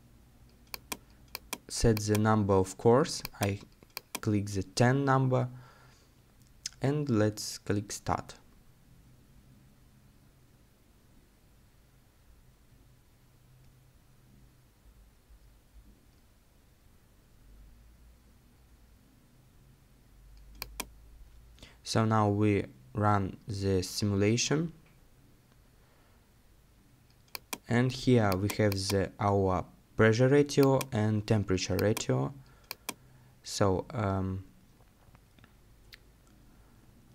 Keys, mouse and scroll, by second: 25.9-27.3 scroll down 1.